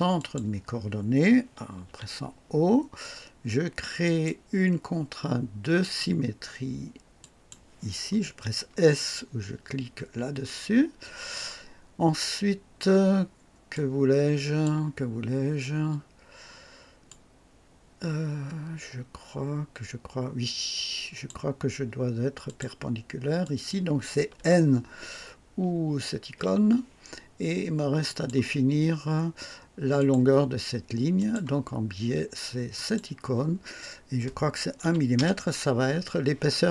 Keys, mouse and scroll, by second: 0.1 click, 1.8 typing, 4.0 click, 5.8 click, 7.2 click, 10.3 s, 13.7-14.8 drag, 17.0-21.4 drag, 22.4 click, 23.4 click, 26.2 n, 28.0 click, 29.9 click, 31.1 click, 32.7 click, 34.8 KP_1, 35.1 KP_Enter.